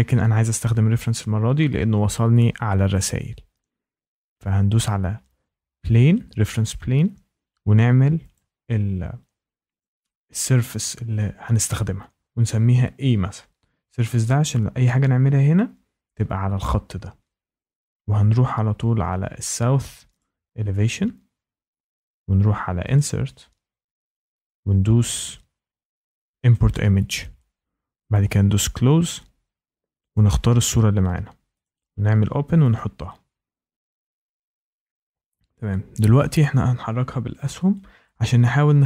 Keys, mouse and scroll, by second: 6.6 click, 8.3 click, 9.8 click, 10.6 click, 12.5 a, 12.9 Return, 19.8 click, 20.1 click, 22.9 click, 26.5 click, 28.7 click, 30.1 click, 31.6 click, 32.7 click, 36.3 Up, 36.7 Left, 37.2 Left, 37.3 click, 37.4 Left, 37.6 Up, 38.3 Up, 38.5 Left, 38.8 Down.